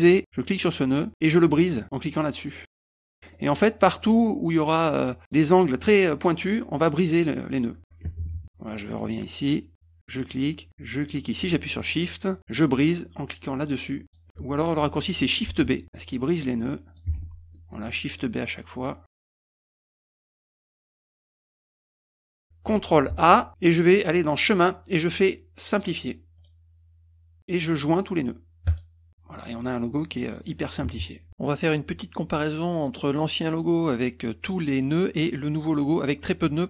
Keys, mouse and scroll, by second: 0.0 middle click, 0.6 click, 2.5 click, 3.1 middle click, 3.3 middle click, 3.4 middle click, 4.0 middle click, 4.1 middle click, 5.2 click, 7.5 click, 8.4 middle click, 8.6 middle click, 8.9 middle click, 9.1 middle click, 10.2 click, 11.1 shift+click, 11.7 middle click, 12.1 middle click, 14.1 shift+click, 15.5 shift+b, 15.8 middle click, 16.9 click, 17.2 shift+b, 17.6 middle click, 18.0 middle click, 19.1 click, 19.1 shift+b, 20.0 click, 20.1 middle click, 20.3 middle click, 20.3 middle click, 20.6 click, 20.9 middle click, 21.3 click, 21.4 middle click, 21.8 click, 21.9 shift+b, 22.4 middle click, 23.1 ctrl+a, 24.5 click, 26.4 click, 28.7 click, 29.4 middle click, 30.2 middle click, 36.3 middle drag.